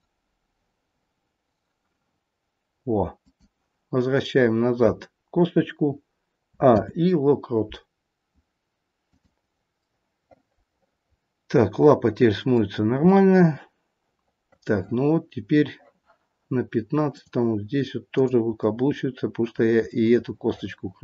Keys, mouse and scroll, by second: 6.5 a, 6.6 i, 9.8 middle click, 10.5 middle click, 13.0 scroll up 1, 13.1 middle click, 15.2-16.1 scroll up 1, 16.1 scroll up 1, 17.2 click, 18.0 click, 19.3 middle click, 19.8 middle click.